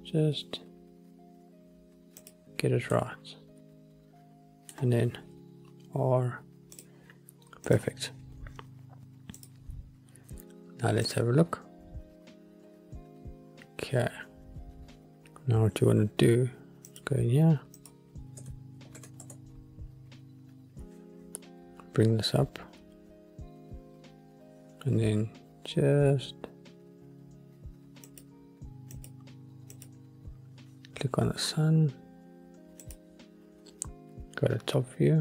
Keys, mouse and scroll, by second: 2.3 click, 3.1-4.9 middle drag, 5.4 r, 6.9 click, 7.8 click, 8.4 scroll down 1, 9.5 click, 11.7 click, 15.1 scroll down 1, 17.0 click, 17.9-19.4 drag, 28.4 click, 29.1 click, 30.1 click, 31.6-32.5 scroll down 1, 32.5-32.9 scroll down 1, 32.9-34.9 drag.